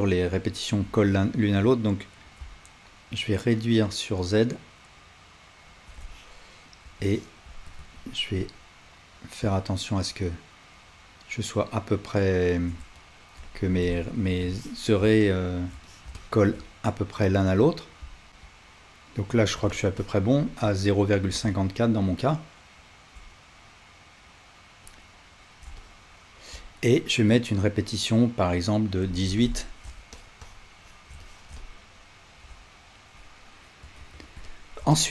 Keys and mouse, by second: 18.3 Tab, 19.3 click, 19.7-35.1 shift+drag, 34.0 alt+z.